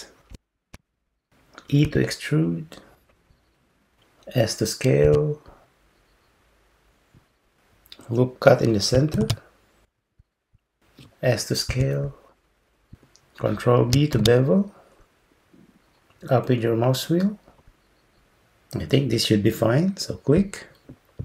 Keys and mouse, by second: 1.9 e, 5.1 s, 9.2 ctrl+r, 11.7 s, 14.2 ctrl+b.